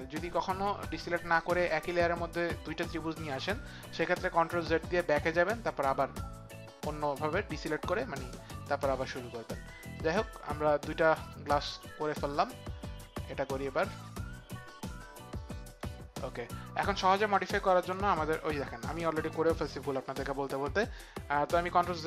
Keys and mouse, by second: 16.3 click, 16.5 click, 21.8 ctrl+z.